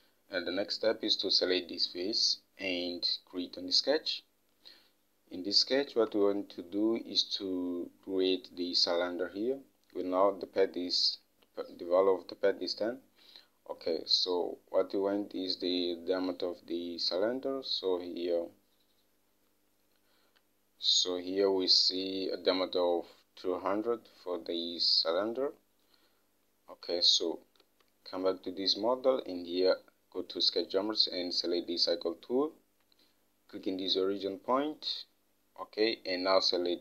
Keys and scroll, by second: 0.1 Home, 6.3 alt+Tab, 28.0 alt+Tab.